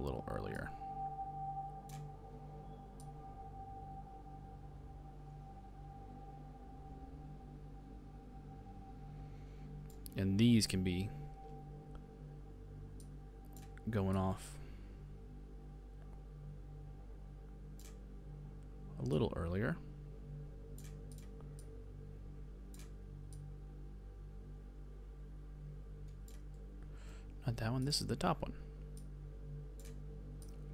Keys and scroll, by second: 26.6 super+z.